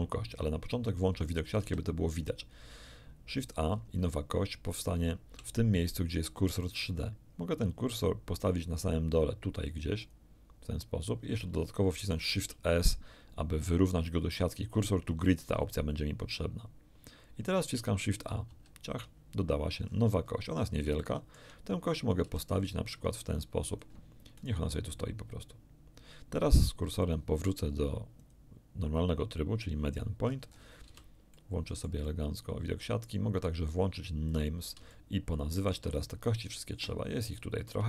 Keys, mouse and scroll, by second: 1.6 a, 2.2-2.5 scroll up 2, 3.7-4.0 scroll down 2, 4.1 shift+middle click, 10.0 click, 12.1 shift+s, 16.2 click, 18.5 shift+a, 19.9-20.5 scroll up 4, 21.0 shift+middle click, 22.3 r, 23.1 ctrl+r, 23.7 ctrl+click, 24.4 ctrl+right click, 27.0 click, 28.2 click, 30.2-30.9 scroll down 2, 30.9 z, 31.3-33.2 middle drag, 34.3 click, 34.9 shift+middle click, 36.7-37.1 scroll up 1, 37.3 shift+middle click.